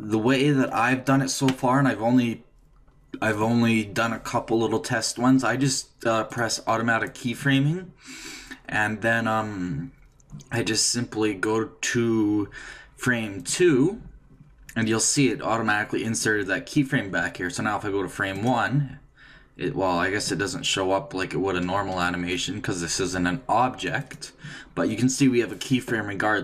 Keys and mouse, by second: 6.3-8.2 drag, 13.4-15.2 drag, 18.3-20.3 drag, 24.0-25.8 drag.